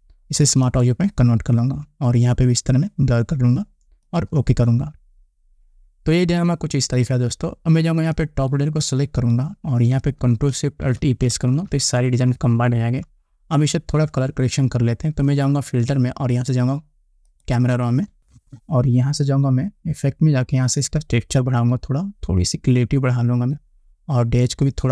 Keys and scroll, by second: 11.4 ctrl+alt+shift+e.